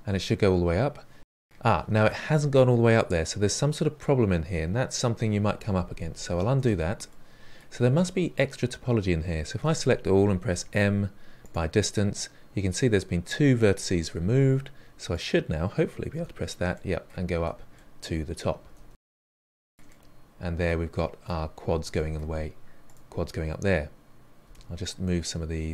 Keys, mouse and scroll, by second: 1.1-3.9 middle drag, 6.4 ctrl+z, 7.0-9.5 middle drag, 9.5 a, 10.4 m, 15.0 click, 16.1 f, 16.7-17.3 middle drag, 17.3 f, 17.7-18.6 middle drag, 18.6 f, 19.0 scroll down 1, 19.2-20.9 shift+middle drag, 20.9 click, 21.6 g, 22.8 1, 22.9 click, 23.0 g, 23.6 middle click, 24.2 click, 24.3 g, 25.1-25.7 middle drag.